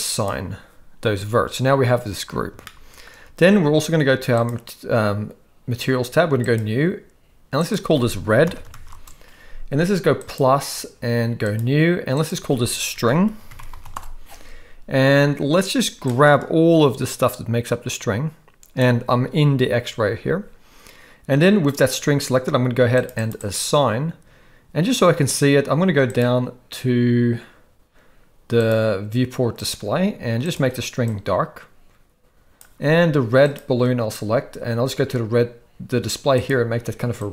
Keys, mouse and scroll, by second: 0.1 click, 2.6-3.1 shift+middle drag, 4.4 click, 6.4-7.1 drag, 7.6-9.0 drag, 11.5 click, 12.1-13.9 drag, 16.1-18.8 drag, 22.9 click, 23.1 click, 23.3 click, 26.1 click, 28.6 click, 29.6 click, 30.4 click, 33.4 click.